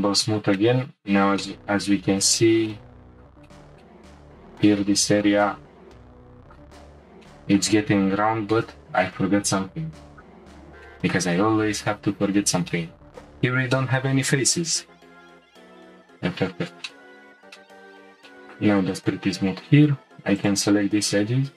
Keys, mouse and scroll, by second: 0.2-1.8 shift+middle drag, 1.8-2.3 scroll up 5, 2.3-4.8 shift+middle drag, 4.8-5.2 scroll up 1, 5.2-6.5 middle drag, 6.5 middle click, 6.7-7.3 scroll up 3, 7.3-7.8 shift+middle drag, 7.8-8.4 scroll up 1, 8.4 Tab, 10.1 click, 10.9-14.2 shift+middle drag, 14.2-14.5 scroll up 1, 15.2 click, 16.0 f, 16.9 shift+middle click, 17.2 scroll down 2, 17.6 shift+middle click, 17.9-18.3 scroll up 1, 18.3 shift+middle click, 18.8 scroll up 1, 19.1 Tab, 20.4 alt+click.